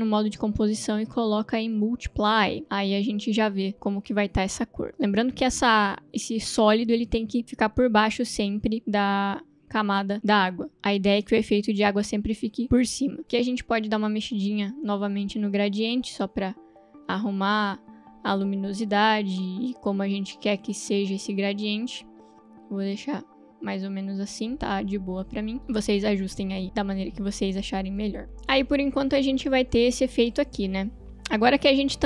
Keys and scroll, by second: 28.8 space.